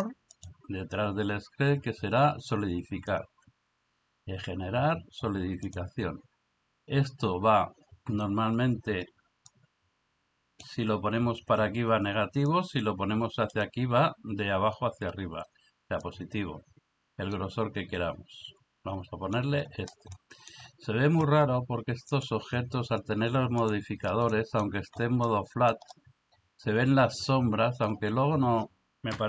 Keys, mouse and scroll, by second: 0.5-5.8 drag, 9.5-10.7 drag, 12.6-13.6 drag, 16.1-19.4 drag, 20.2 middle click, 22.3-23.7 drag, 24.3 middle drag, 25.3-25.7 middle drag.